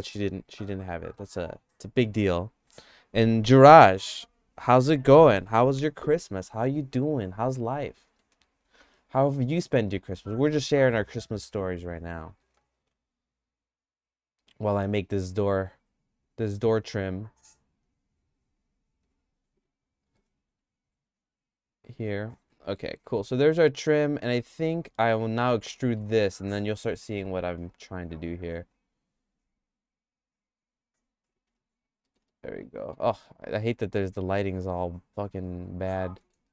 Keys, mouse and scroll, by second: 8.0 middle click, 8.9 Tab, 9.3 Tab, 9.8 Tab, 12.3 g, 20.1 g, 22.7 Tab, 23.2 middle click, 23.4-26.0 shift+middle drag, 26.2 Tab, 27.1 a, 27.6 e, 31.5 Tab, 32.1 middle click, 32.4 shift+middle click, 34.2 click, 34.7 click, 35.7 click, 36.2 middle click.